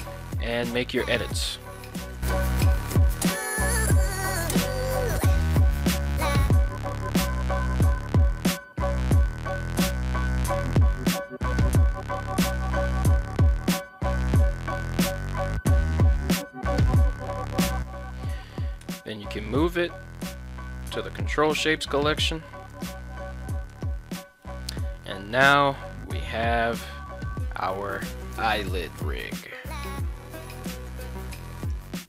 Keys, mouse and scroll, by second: 0.6 middle click, 2.1 s, 2.2 z, 3.0 click, 4.6 right click, 4.8 shift+right click, 5.6 shift+right click, 5.7 shift+right click, 6.1 s, 6.2 z, 7.6 click, 7.9 right click, 8.3 shift+right click, 8.8 s, 8.8 x, 9.8 click, 10.2 right click, 10.3 shift+right click, 10.6 shift+right click, 10.7 shift+right click, 12.6 s, 12.7 x, 14.4 click, 14.8 right click, 15.0 shift+right click, 15.5 s, 15.6 z, 16.6 click, 17.0 Tab, 18.8 m, 22.7 right click, 23.4 ctrl+Tab, 23.9 right click, 24.4 middle click, 25.4 middle click, 25.8 g, 31.6 right drag.